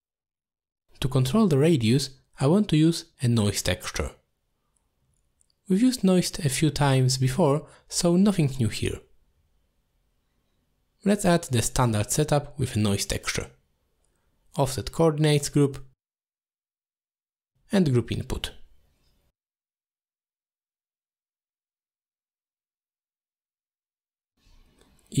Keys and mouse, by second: 1.3 click, 2.5 click, 4.0 middle click, 5.0 shift+a, 10.2 middle click, 11.4 shift+a, 13.9 f, 17.7-18.6 drag, 18.9 middle click, 20.0 shift+a, 23.4-24.2 drag, 24.3 middle click.